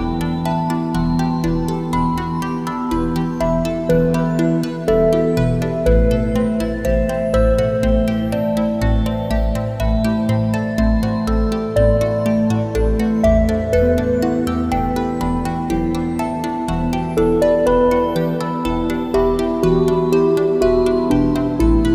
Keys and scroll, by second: 3.5 space, 7.9 a, 10.8 space, 15.4 space, 17.4 `, 17.7 space.